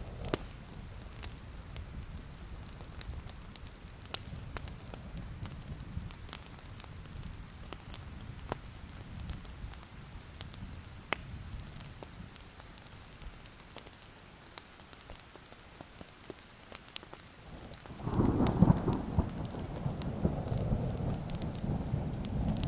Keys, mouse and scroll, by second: 0.5-0.8 alt+scroll up 1, 1.5 click, 1.9 alt+i, 1.9 alt+scroll up 1, 3.5-8.5 drag, 9.0 alt+scroll up 1, 9.4-10.5 drag, 14.2 alt+scroll down 1, 14.5 scroll up 1, 14.7-16.3 ctrl+scroll down 1, 16.3 click, 16.6-17.4 alt+scroll up 1, 17.4-22.6 drag.